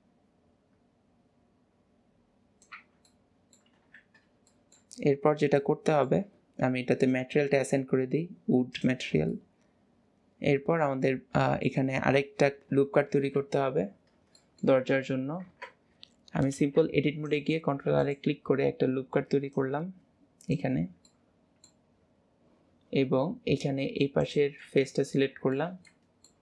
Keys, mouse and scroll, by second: 3.1 middle click, 5.3 middle click, 7.1-9.3 drag, 12.5-15.5 middle drag, 19.6 click, 21.1-22.2 middle drag, 24.3 click, 25.1-26.4 middle drag.